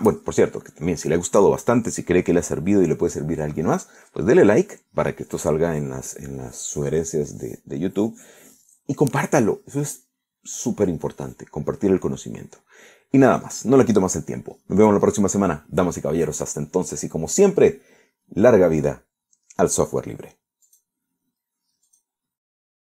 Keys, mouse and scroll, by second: 21.7 click, 22.9 click.